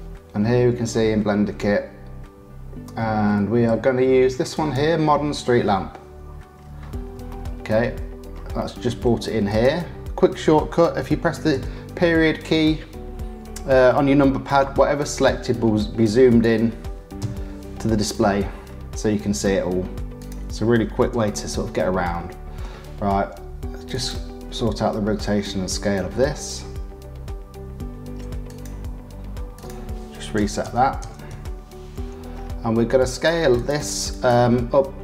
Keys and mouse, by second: 7.1 shift+middle click, 8.6 shift+click, 9.5 click, 11.5 KP_Decimal, 16.3 click, 17.2 KP_Decimal, 20.2 click, 21.1 KP_Decimal, 22.1 middle click, 23.9 click, 28.5 click, 29.5-33.7 drag, 34.1 click.